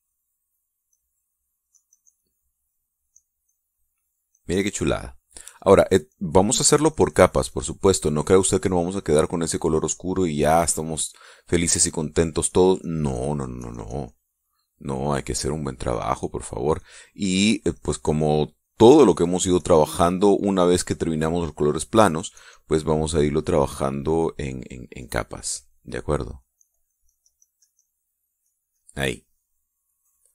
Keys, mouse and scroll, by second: 1.4-5.5 drag, 5.7-10.2 drag, 10.9-16.9 drag, 17.3-23.4 drag, 23.9-28.6 drag, 29.0 click.